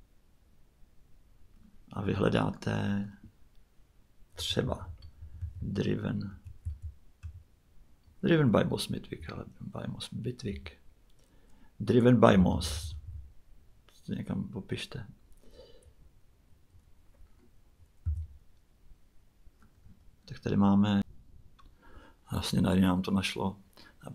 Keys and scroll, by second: 4.1-7.2 typing, 9.0 Page_Down, 10.5 Page_Up, 12.3-13.0 typing, 18.0 Return.